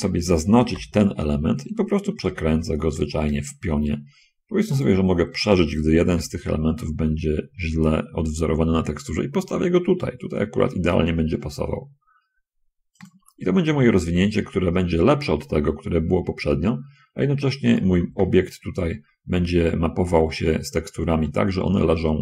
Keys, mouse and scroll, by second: 1.0 l, 2.6 r, 5.1 ctrl+click, 6.3 g, 14.1 middle click, 14.1 scroll up 1, 14.6 a, 16.1 middle click, 17.0 shift+click, 17.6 shift+scroll up 1, 18.4 shift+space, 19.5 click, 19.9 middle click, 20.4-22.2 middle drag.